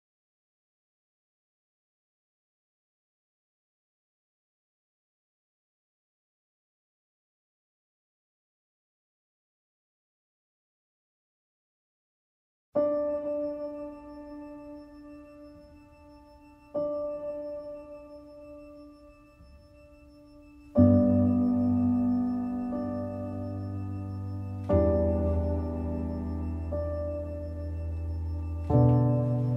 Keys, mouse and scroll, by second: 4.6 z, 5.1 z, 5.6-7.5 middle drag, 7.5 Tab, 7.6 click, 7.9-9.7 middle drag, 9.7 scroll up 1, 10.0 shift+middle click, 10.7 scroll down 1, 10.9 middle click, 11.5 shift+a, 12.4 scroll down 2, 12.5 shift+middle click, 12.9 s, 13.5 middle click, 13.8 click, 14.9 shift+a, 15.3 g, 16.1-17.3 drag, 17.3-17.6 scroll up 3, 17.6 shift+middle click, 17.8 scroll down 1, 17.9 middle click, 18.0 z, 18.5-20.6 middle drag, 20.6-21.7 drag, 21.7-23.2 middle drag, 23.6-25.8 middle drag.